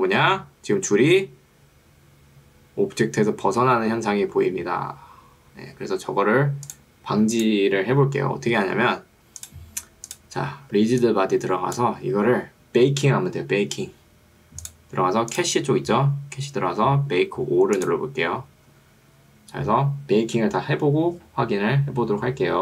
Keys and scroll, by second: 11.0 ctrl+2, 12.2 Escape.